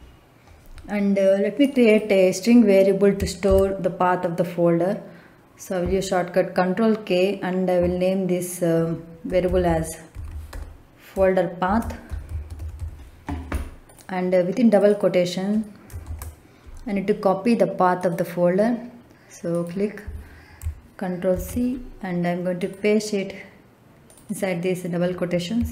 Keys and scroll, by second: 3.4 ctrl+k, 9.2-10.4 typing, 11.6-12.7 typing, 16.0 shift+', 21.2 ctrl+c.